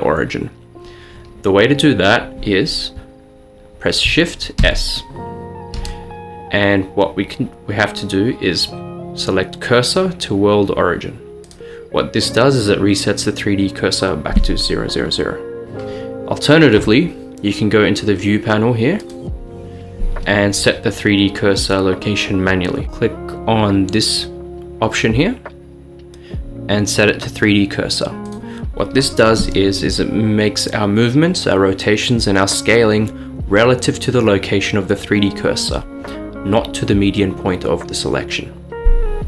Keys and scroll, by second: 4.8 s.